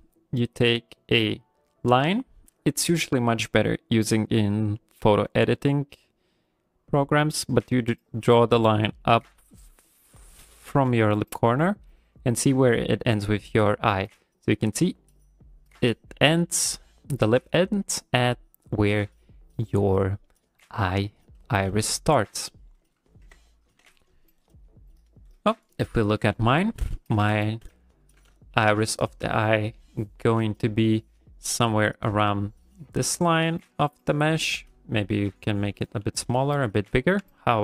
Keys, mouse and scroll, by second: 25.3 right click, 26.4 shift+middle click, 26.9 ctrl+middle click, 27.4 shift+middle click, 27.8 ctrl+middle click, 28.3 shift+middle click, 30.9 click, 32.6 click, 35.3 click, 36.4 ctrl+middle click, 36.7 ctrl+middle click, 37.0 shift+middle click, 37.3 ctrl+middle click.